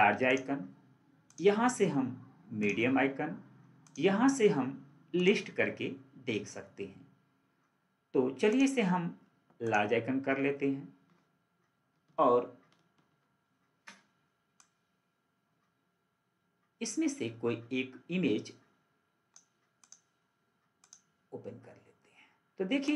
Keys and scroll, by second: 13.0 ctrl+4.